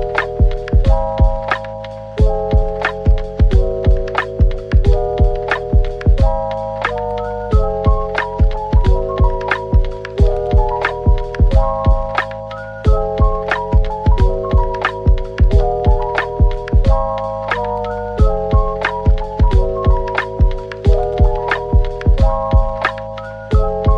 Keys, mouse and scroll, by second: 0.9 Tab, 1.7 typing, 4.4-5.3 typing, 7.8-8.8 typing, 13.4 middle click, 15.6 typing, 18.8 typing, 21.1 middle click, 22.3 Tab.